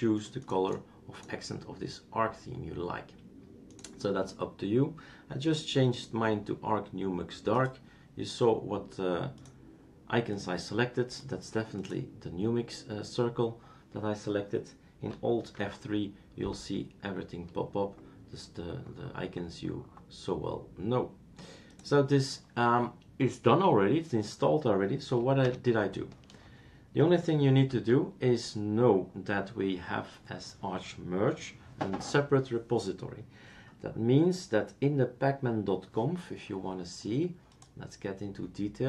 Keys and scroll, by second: 15.5 alt+F3, 25.6 super+Return, 27.7 s, 29.0 super+Return, 29.0 s.